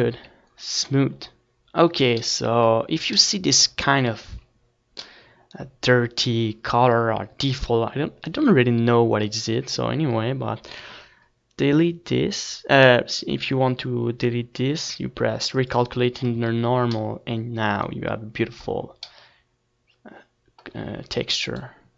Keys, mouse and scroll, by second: 3.4 s, 5.8 click, 6.2 Tab, 6.6 ctrl+s, 7.9 Tab, 8.8 z, 9.3 z, 9.5-12.2 middle drag, 12.2 right click, 12.4 middle click, 13.2 z, 13.4-18.5 drag, 13.6 right click, 13.8 z, 14.2 right click, 15.9 Tab, 16.0 ctrl+s, 18.7 click, 19.0-21.4 middle drag.